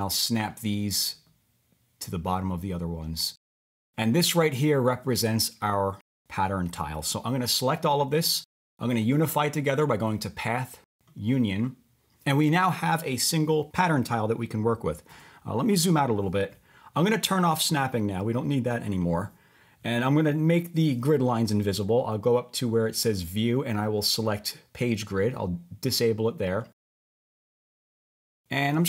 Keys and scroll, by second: 15.1 1.